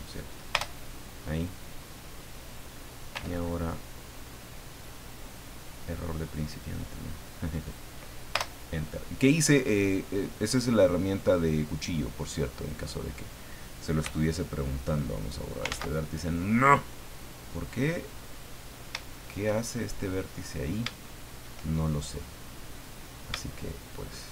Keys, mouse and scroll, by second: 0.5 Return, 3.1 k, 5.1 click, 6.4-7.9 drag, 8.3 Return, 10.4 click, 11.1-11.6 scroll up 2, 12.6 right click, 14.0 x, 14.8 click, 15.7 ctrl+z, 18.2 middle click, 19.1 shift+middle click, 19.9 shift+scroll down 3, 20.3 middle click, 21.0 shift+middle click, 22.8 right click, 23.7 shift+right click.